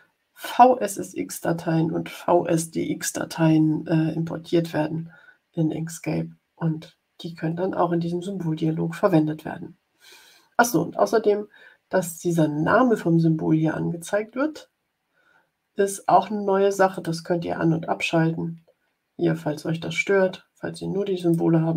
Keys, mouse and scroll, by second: 16.8 click, 21.1 click.